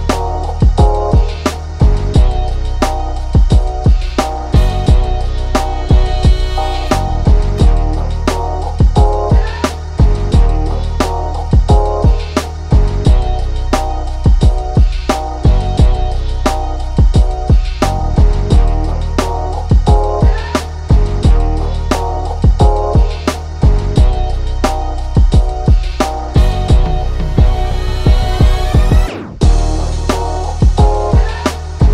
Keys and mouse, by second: 1.1-6.1 drag, 6.8-8.6 drag, 9.8 ctrl+shift+[, 10.1 ctrl+], 11.0 click, 12.1 ctrl+z, 12.3-14.6 drag, 15.6-18.6 drag, 19.6 click, 24.4-28.1 drag, 28.5-31.9 drag.